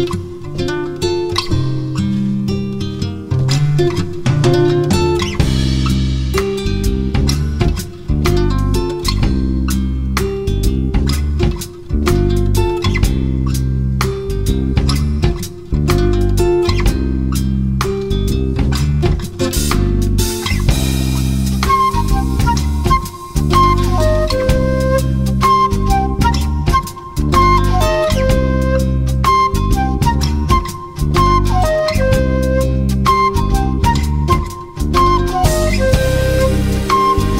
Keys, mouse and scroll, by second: 0.5-2.3 drag, 2.8-4.1 drag, 5.2 click, 5.9 middle click, 6.5 middle click, 7.6-8.9 drag, 12.3 right click, 13.0-14.4 drag, 14.4 middle click, 16.8 a, 17.4 Tab, 17.9 a, 18.1 a, 18.6 b, 21.3 click, 23.4 click, 26.9-30.5 drag, 31.1 click, 31.6-32.9 middle drag, 33.4 click.